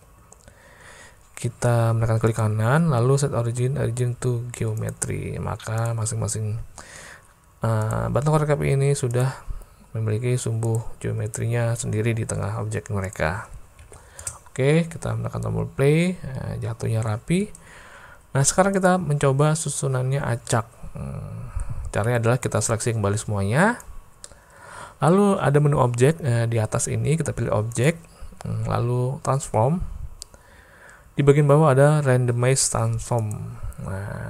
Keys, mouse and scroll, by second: 2.5-4.9 drag, 5.8 click, 7.9 click, 9.2 click, 10.7 click, 13.1 click, 13.8 alt+a, 14.2 space, 17.3 space, 18.8 click, 20.5-21.7 drag, 24.4-25.2 middle drag, 27.7-33.4 drag.